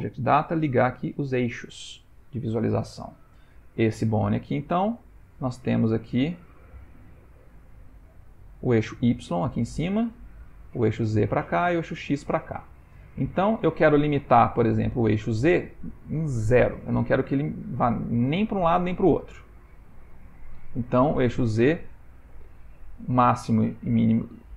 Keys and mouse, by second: 1.0 click, 2.9 ctrl+middle click, 3.8 click, 4.7 middle click, 5.1 middle click, 7.3 click, 7.8 shift+middle click, 7.9 shift+middle click, 8.3 shift+middle click, 9.6 middle click, 9.7 middle click, 12.5 shift+middle click, 12.6 shift+middle click, 12.8 shift+middle click, 13.3 middle click, 20.4 click, 21.6 click, 22.7 click.